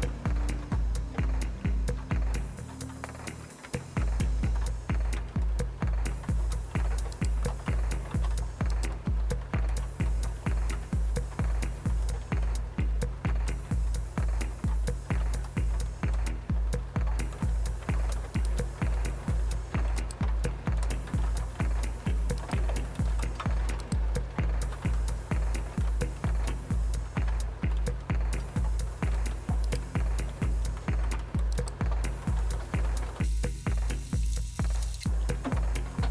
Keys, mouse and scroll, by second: 3.6 Return, 7.1 click, 8.7 click, 14.4-16.0 scroll down 7, 16.5 scroll down 1, 18.4 click, 20.0 click, 22.4 click, 23.8 click, 25.8 scroll down 1, 29.7 click, 31.5 click.